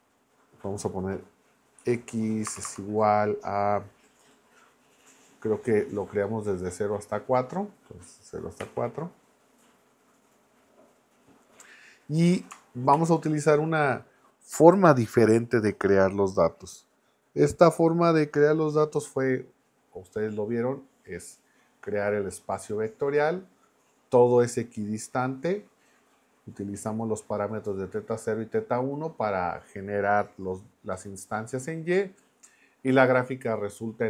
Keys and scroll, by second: 1.8 x, 2.4 space, 2.5 =, 2.6 space, 8.6 4, 12.9 shift+8.